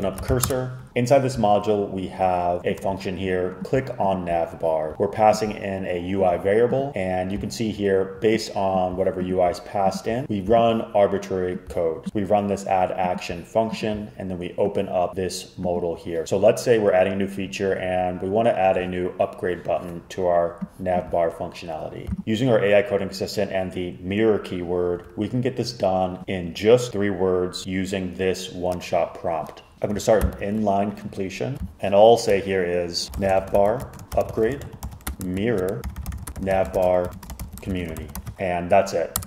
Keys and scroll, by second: 0.0-1.0 typing, 29.7 ↻, 30.3 super+k, 32.8-39.2 typing.